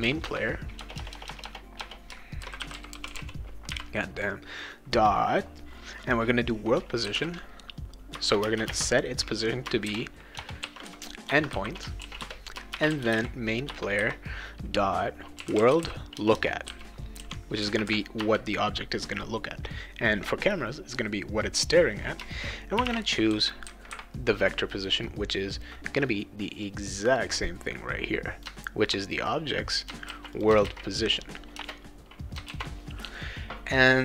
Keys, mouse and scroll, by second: 0.0-3.7 typing, 6.8-8.7 typing, 8.1 Return, 9.8-11.3 typing, 12.0 ctrl+s, 12.5-14.0 typing, 15.1-17.1 typing, 18.2 Return, 22.5-23.8 typing, 27.4 click, 30.0 ctrl+c, 30.3 click, 30.6 ctrl+v, 31.5 BackSpace, 32.5 ctrl+s.